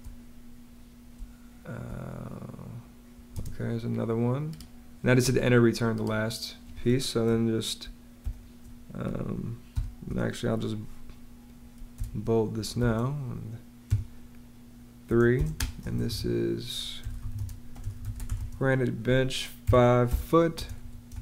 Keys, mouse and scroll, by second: 1.0 space, 3.2 space, 8.1 9, 9.6 BackSpace, 11.8 super+b, 12.6 shift+super+9, 13.8 3, 15.2-21.2 typing.